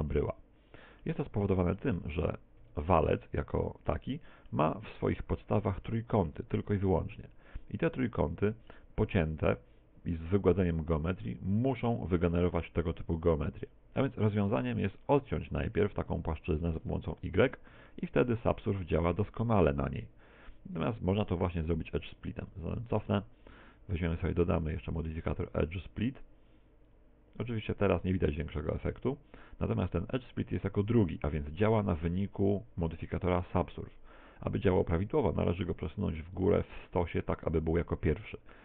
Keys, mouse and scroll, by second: 0.3 shift+middle click, 1.5 shift+middle click, 2.6 Tab, 3.9 middle click, 7.9 middle click, 11.4 middle click, 14.8 a, 15.4 alt+shift+right click, 16.2 shift+right click, 17.2 y, 17.7 Tab, 21.6 Tab, 22.3 ctrl+z, 22.6 ctrl+z, 23.2 Tab, 25.4 click, 28.8 Tab, 34.8 Tab, 36.7 click.